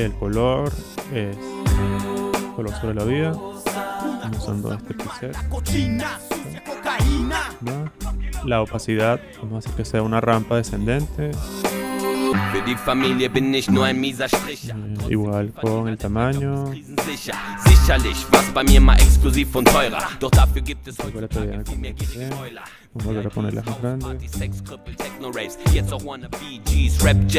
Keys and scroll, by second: 20.7-21.7 typing, 24.1-25.1 typing, 26.2 space.